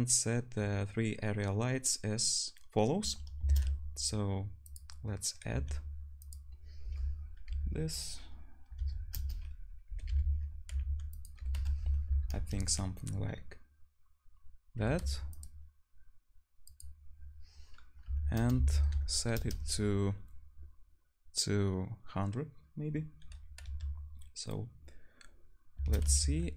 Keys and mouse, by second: 3.5 shift+a, 5.5 s, 6.4-8.8 drag, 6.8 r, 8.8-10.7 right drag, 10.7-16.7 drag, 10.7 g, 11.4 r, 14.8 g, 18.9 0, 23.6-25.2 drag, 23.6-25.2 middle drag, 23.6-25.2 right drag, 23.6 z, 25.9 shift+d.